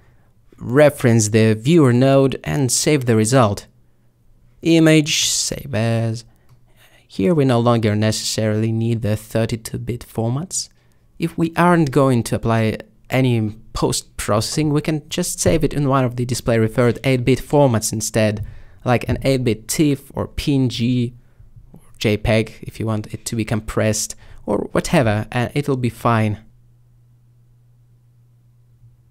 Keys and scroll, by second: 14.9-16.1 typing.